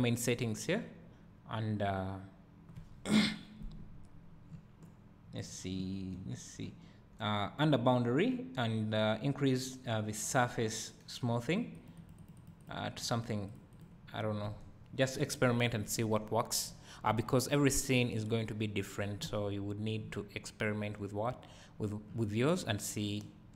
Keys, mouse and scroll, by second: 3.0-16.4 right drag, 16.4 scroll down 1, 16.7 `.